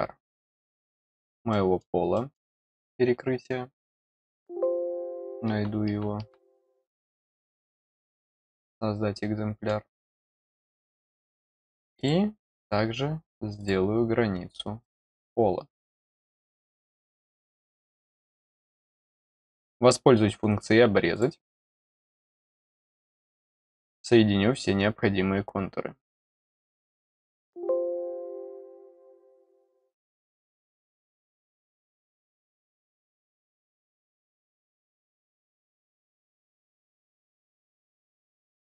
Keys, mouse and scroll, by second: 0.5 click, 1.4 middle click, 2.1 middle click, 6.6 click, 8.0 click, 9.9 middle click, 10.8 click, 11.9 click, 12.5 click, 13.5 click, 14.7 click, 15.1 middle click, 16.0 click, 16.6 click, 17.3 click, 17.8 middle click, 19.5 click, 21.1 click, 21.8 click, 22.6 click, 23.1 click, 23.4 middle click, 26.4 click, 27.4 click, 28.7 click, 30.1 click, 32.0 click, 32.5 click, 33.3 click, 33.9 click, 35.1 click, 38.1 click.